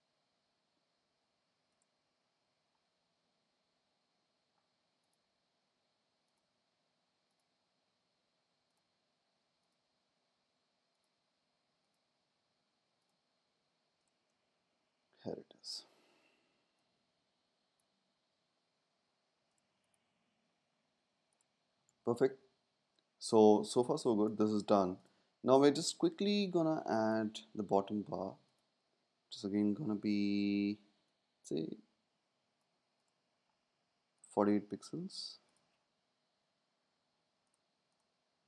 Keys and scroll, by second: 20.8 super+s, 21.8 space, 36.3 Down.